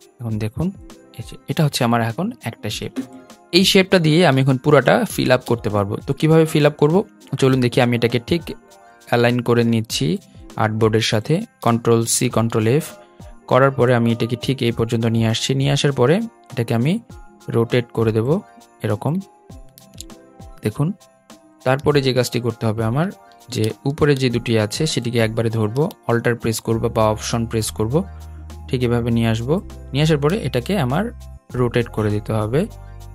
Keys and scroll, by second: 11.8 super+c, 13.4 super+f.